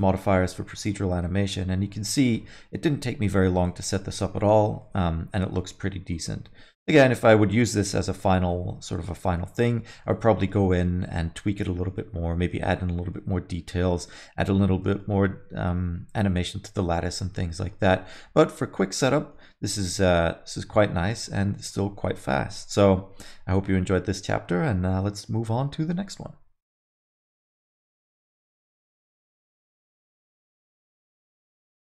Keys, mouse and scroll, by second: 0.5 middle click, 3.5 space, 3.6 middle click, 4.4 alt+shift+z, 4.8 alt+middle click, 5.6 space, 6.2 alt+middle click, 8.1 middle click, 9.0 space, 9.3 alt+middle click, 10.4 alt+shift+z, 10.6 middle click, 11.0-11.6 scroll up 2, 11.6 middle click, 12.3 middle click, 12.6 middle click, 12.9 scroll down 1, 13.1 alt+middle click, 13.9 middle click, 14.8 middle click, 15.0 alt+middle click, 16.7 middle click, 17.0 alt+middle click, 17.2 alt+middle click, 17.3 middle click, 17.9 alt+middle click, 18.5 middle click, 18.8 scroll down 1, 19.1 alt+middle click, 19.7 middle click, 22.0 middle click.